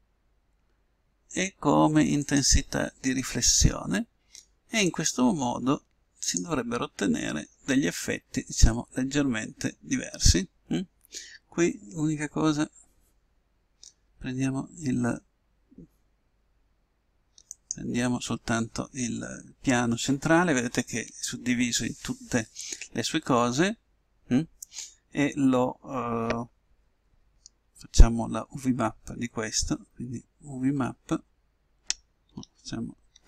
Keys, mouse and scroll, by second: 0.7 middle click, 2.3-3.9 drag, 3.9 middle click, 4.9-6.6 drag, 18.0-19.7 right drag, 30.8 u.